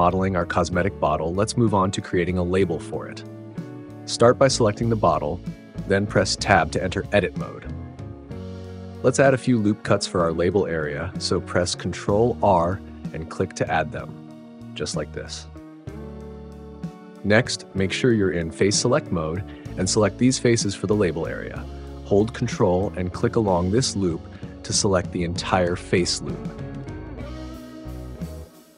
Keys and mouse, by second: 5.0 Tab, 6.6 click, 9.4 ctrl+r, 14.4 click, 15.4 click, 17.3-22.5 drag, 26.5 ctrl+click, 28.0 ctrl+click.